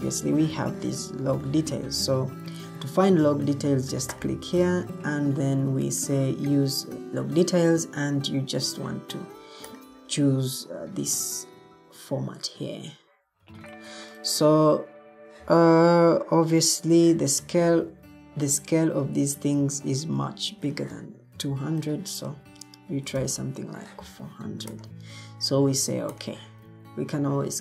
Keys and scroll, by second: 22.8-23.7 typing.